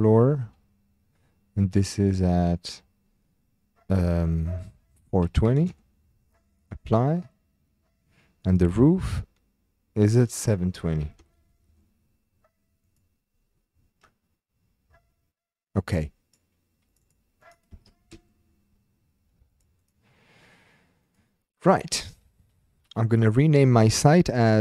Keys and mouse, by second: 1.7-5.7 drag, 6.9 click, 10.2-11.7 drag, 12.9 click, 15.7 click, 16.9 click, 17.1-18.1 drag, 19.5 click, 19.8 click, 21.0 click, 22.9-24.6 drag.